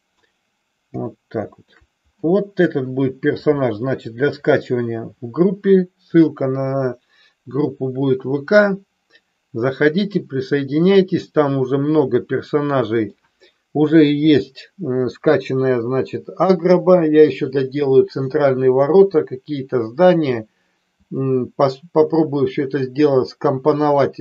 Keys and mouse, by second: 1.3-1.9 middle drag, 11.1-13.2 middle drag, 14.0 KP_1.